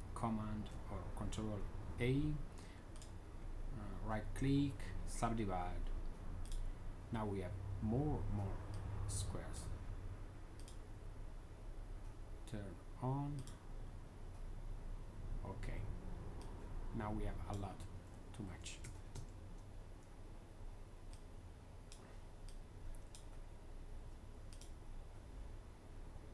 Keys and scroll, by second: 0.3 super+a, 18.3 z, 19.0 z.